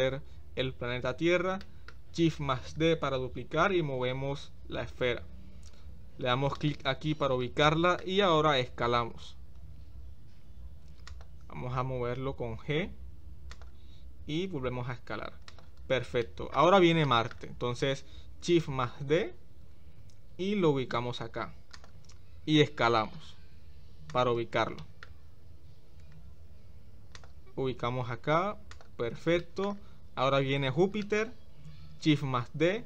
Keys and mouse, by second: 1.6-1.9 shift+middle drag, 2.7 shift+d, 7.6-8.0 shift+middle drag, 8.9 s, 12.1 g, 16.3 middle click, 17.1 shift+middle click, 18.8 shift+d, 22.3 s, 24.8 shift+middle click, 25.9 g, 29.4 middle click, 31.0 shift+middle click, 32.4 shift+d.